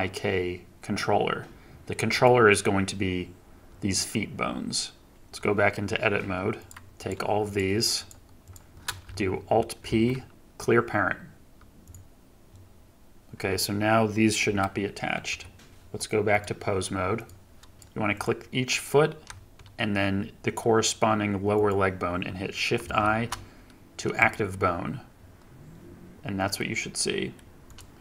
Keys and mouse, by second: 5.1 Tab, 6.6 click, 9.8 alt+p, 14.4 g, 15.7 g, 16.2-19.2 drag, 21.5 shift+click, 22.8 shift+i, 26.1-27.3 drag.